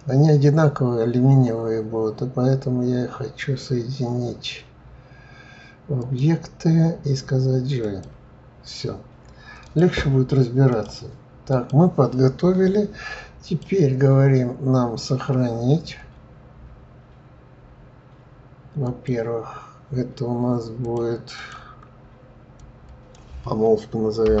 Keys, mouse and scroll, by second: 6.0-9.0 drag, 9.6 click, 10.7 click, 11.5 click, 13.4-16.5 drag.